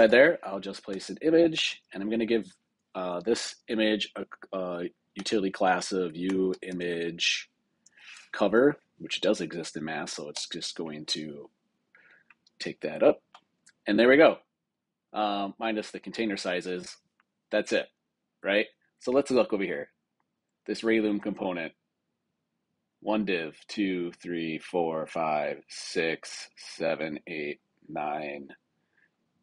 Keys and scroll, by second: 0.8 Return, 1.5 super+Return, 8.4 Down, 10.3 Return.